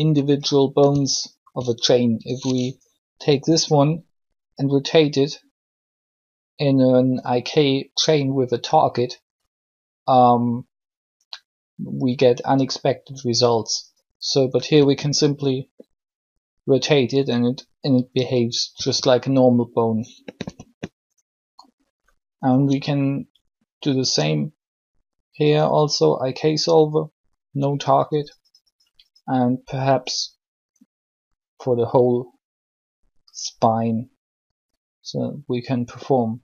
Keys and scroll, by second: 3.2 alt+shift+r, 14.7 r, 18.7 r.